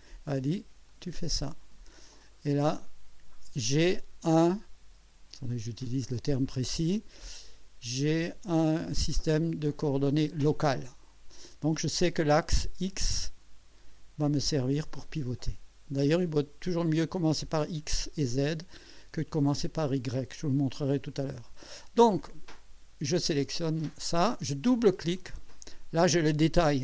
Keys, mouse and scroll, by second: 0.9 click, 2.7 click, 23.4 click, 25.2 click.